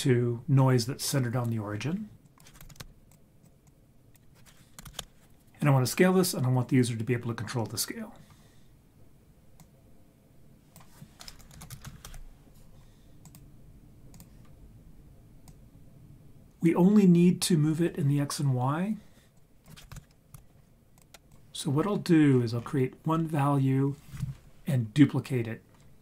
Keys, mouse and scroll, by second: 2.2-3.1 drag, 3.4 click, 3.6-5.0 drag, 9.6 click, 10.0-13.3 drag, 14.1-16.5 drag, 16.5-16.9 scroll down 2, 16.9-17.3 scroll up 3, 19.4-21.0 drag, 21.3 click, 21.8 scroll down 3, 22.3-24.2 scroll up 4, 24.2-24.6 scroll up 1.